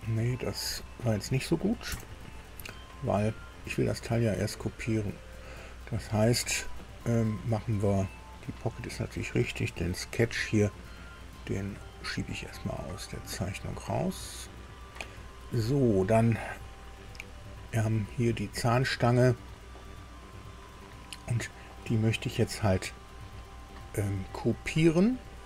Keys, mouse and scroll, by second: 0.8 click, 1.9 Delete, 6.9 click, 8.3 click, 11.8-13.3 drag, 15.0 click, 17.6 click, 20.1-21.8 middle drag, 21.9-23.5 shift+middle drag.